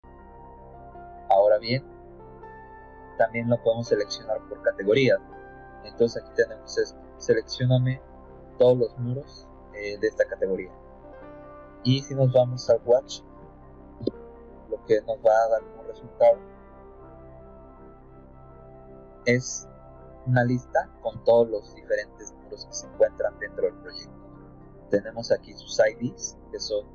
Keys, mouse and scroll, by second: 0.1 middle click, 1.0 middle click, 2.0 middle click, 6.2 click, 7.3 click, 9.4 click, 10.2 click, 11.8 right click, 12.6 w, 13.9 Return, 15.4 click, 16.0 click, 16.9 click, 18.4 click, 19.8-21.5 scroll down 9, 25.9-26.4 scroll up 4, 26.4 middle click, 26.4 scroll down 1, 26.7 scroll up 2.